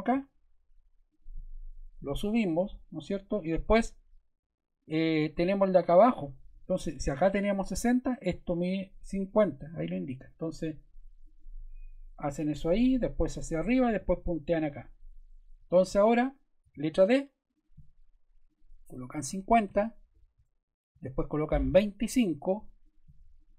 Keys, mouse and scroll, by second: 2.8-4.0 drag, 11.2-12.3 drag, 12.4-13.7 drag, 14.3 click, 15.6 super+z, 16.6 d, 17.5 click, 18.4 click, 19.2-20.1 typing, 20.3 Return, 22.8 click, 23.3 click.